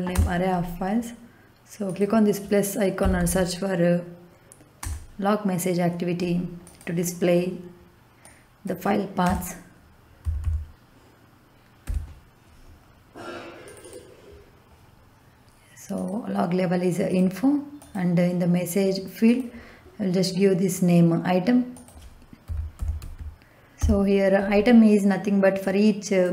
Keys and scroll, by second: 0.1 Return, 2.7-3.6 typing, 4.7 BackSpace, 9.2-11.8 typing, 22.1-23.7 typing.